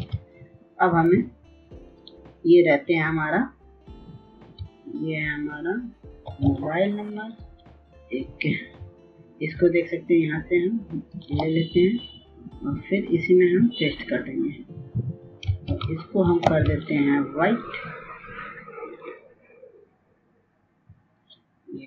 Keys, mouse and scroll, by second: 1.1 Up, 2.8 Return, 4.8 click, 9.2 x, 10.3 click, 12.6 alt+click, 18.6 ctrl+v, 19.6 ctrl+a, 20.6 click.